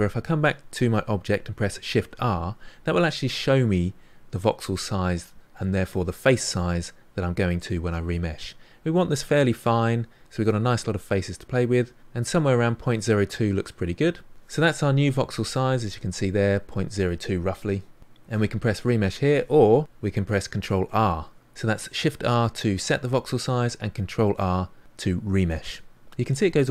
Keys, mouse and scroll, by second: 1.9 shift+r, 21.2 ctrl+r.